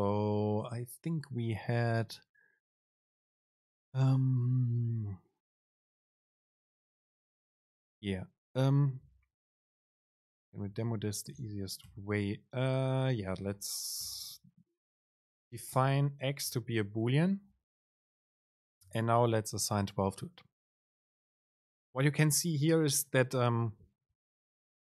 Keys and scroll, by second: 11.6 BackSpace, 12.8 Left, 14.2 BackSpace, 15.9 super+space, 16.4 Right.